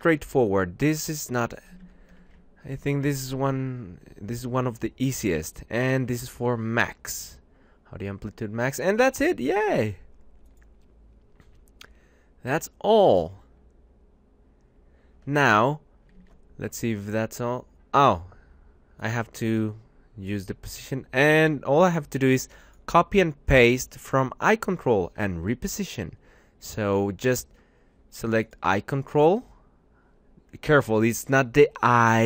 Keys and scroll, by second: 1.7 ctrl+shift+Right, 2.5 shift+Left, 9.4 Return.